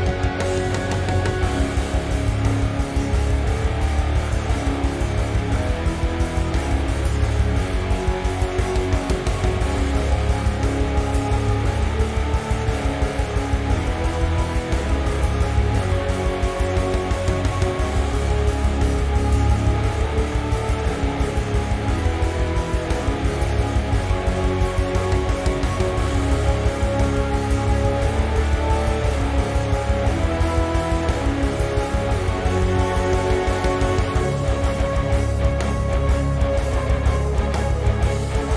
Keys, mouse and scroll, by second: 0.3 click, 1.2 click, 1.6-2.0 scroll up 2, 2.8-3.9 drag, 4.4 click, 5.5 click, 6.0-10.3 middle drag, 6.2-6.9 scroll down 1, 6.9 `, 7.9 scroll down 1, 9.1 scroll up 1, 9.4 scroll down 1, 10.3 click, 10.6-14.0 drag, 13.2 KP_Enter, 13.8 scroll up 2, 14.0-15.6 middle drag, 14.3 `, 14.6-15.0 scroll down 2, 15.3-15.6 scroll up 2, 15.6 click, 16.7 ctrl+z, 17.8 click, 18.2 click, 19.9 click, 20.3 shift+middle click, 21.2 drag, 22.0 click, 23.5-25.6 drag, 24.9 KP_Enter, 26.4-26.9 drag, 28.7-29.6 drag, 29.8 alt+shift+click, 30.4 g, 31.6 right click, 31.7 g, 32.5 click, 33.0 c, 33.4 right click, 33.6 g, 34.1 click, 34.3 Tab, 34.5 scroll down 1, 34.6-37.2 middle drag, 35.1 Tab, 35.3-35.6 scroll down 1, 36.5-37.2 scroll up 1, 37.2 click, 38.0 click.